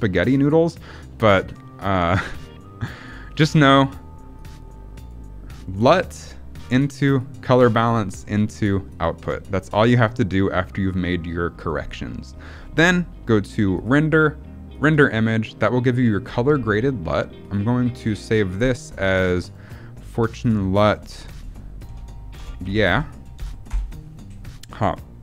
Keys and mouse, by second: 0.3-3.0 drag, 3.3 click, 4.2-5.0 drag, 6.3 middle click, 6.8 click, 9.6 middle click, 13.7-14.8 drag.